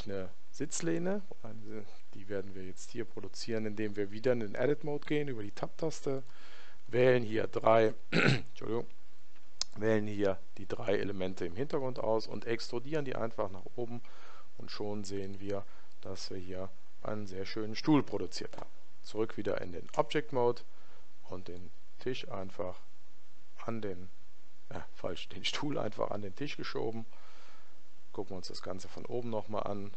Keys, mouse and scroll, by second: 21.5 click, 28.2-29.9 middle drag, 28.9 z.